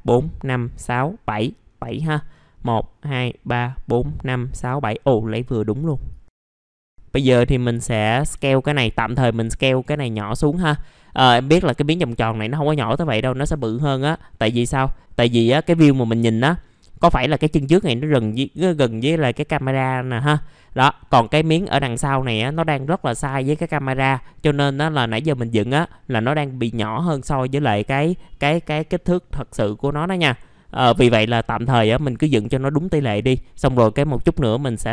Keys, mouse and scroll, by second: 1.5 scroll down 1, 1.6 scroll up 1, 1.8 middle click, 2.1 scroll down 1, 6.1 click, 6.6 scroll up 1, 6.8 middle click, 7.7-12.9 drag, 13.8-14.6 scroll down 1, 14.6 middle click, 15.0-16.6 scroll up 1, 16.6 middle click, 24.7 scroll up 1, 31.4 middle click.